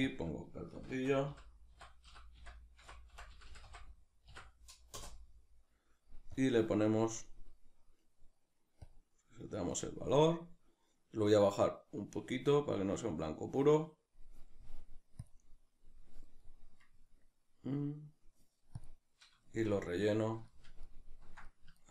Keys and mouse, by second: 5.0-8.8 drag, 5.0 l, 5.1 Return, 8.8-12.2 right drag, 12.2-17.4 drag, 17.4-18.9 middle drag, 18.9 click, 19.5-21.9 shift+middle drag.